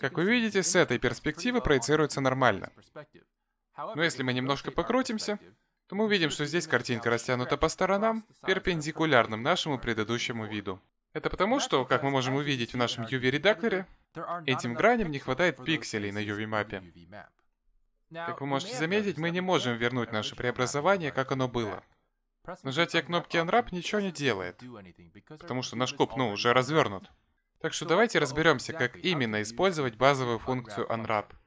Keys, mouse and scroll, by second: 2.1-2.5 scroll up 4, 2.6 middle click, 6.5 middle click, 7.9 shift+middle click, 8.6 middle click, 13.1-14.0 scroll up 7, 14.0 middle click, 14.0 scroll down 1, 14.4 middle click, 14.4-15.5 scroll up 1, 15.5 middle click, 18.8-20.1 scroll down 9, 20.1 middle click, 22.6 click, 27.0 click, 27.4 click, 29.1 a, 29.7 middle click.